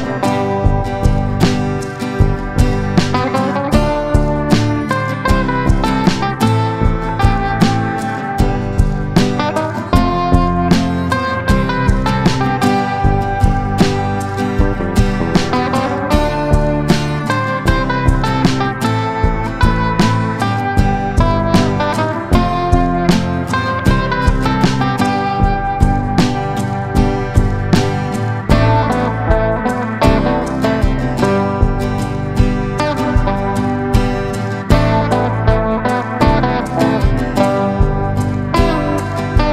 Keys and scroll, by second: 6.2 space, 6.8 shift+F2, 7.0 F3, 13.6 ctrl+r, 13.9 F3, 15.8 shift+F2, 16.0 F3, 16.2 Escape, 19.5 F3, 20.8 ctrl+g, 23.2 c, 23.4 Escape, 24.2 F3, 24.5 F2, 35.8 ctrl+g, 36.6 c, 37.0 Escape, 39.0 F3.